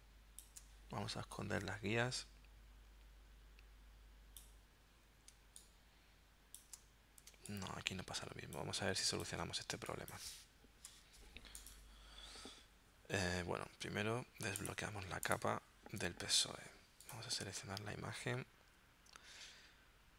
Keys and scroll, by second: 5.4 space, 7.3 space, 9.8 space, 10.9 v.